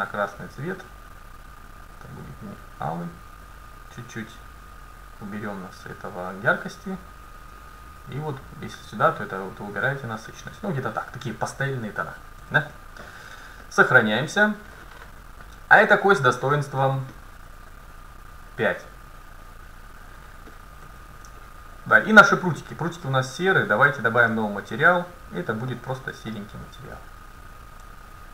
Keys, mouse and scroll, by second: 12.5 a, 13.2 ctrl+s, 14.5-16.4 middle drag, 15.8-18.2 right drag, 18.2-20.2 drag, 20.5 middle click, 20.9 a, 21.4 middle click, 22.4-24.2 right drag, 24.2-28.3 drag.